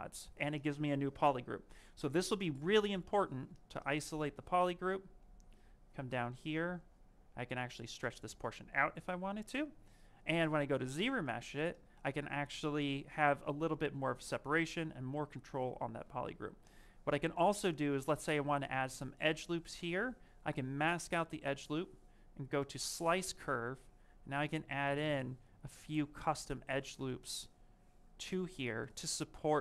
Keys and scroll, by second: 24.2 ctrl+shift+space, 26.3 ctrl+shift+space, 28.2 ctrl+shift+space.